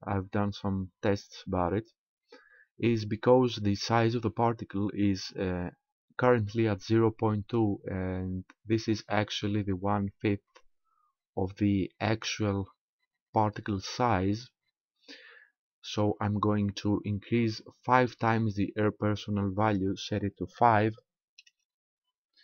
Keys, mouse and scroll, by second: 19.7 click.